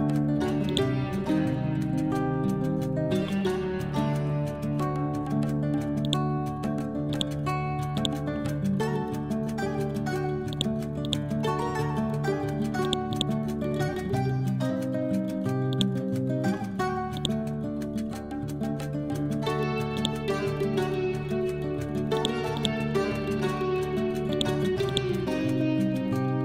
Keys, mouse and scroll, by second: 1.3 scroll up 1, 4.2 scroll down 1, 5.9 click, 6.4-7.0 scroll down 1, 7.0 click, 8.8 ctrl+z, 9.3 ctrl+End, 10.4 click, 11.7 ctrl+End, 12.7 click, 14.0 scroll up 1, 15.6-19.8 drag, 20.3-21.9 scroll down 1, 22.1 click, 22.4 right click, 24.2 click, 25.6 scroll up 1.